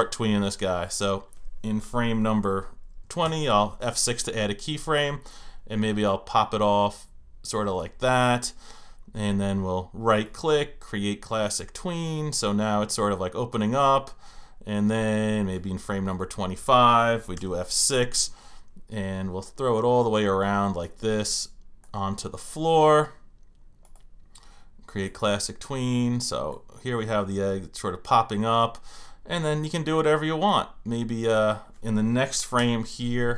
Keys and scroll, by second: 3.3 F6, 17.4 F6, 32.6 F6.